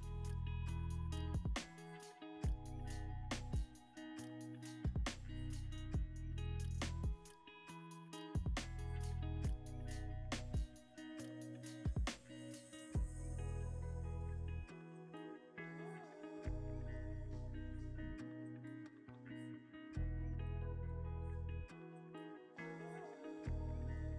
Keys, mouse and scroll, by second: 0.7 scroll up 1, 4.6-11.2 drag, 5.2 ctrl+alt+middle click, 5.2 scroll down 2, 5.6 ctrl+alt+KP_0, 6.4 g, 6.7 y, 8.2 z, 11.7 s, 11.9 x, 13.4 y, 16.1 g, 16.3 y, 19.8 z, 21.1-21.6 scroll down 1, 21.6-21.9 scroll up 1, 22.3 scroll up 1, 22.4 shift+a.